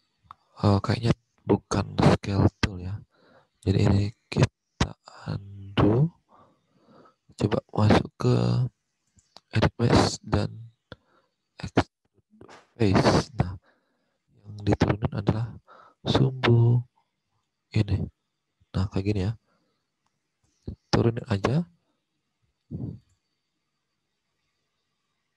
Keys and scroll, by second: 5.9 ctrl+z.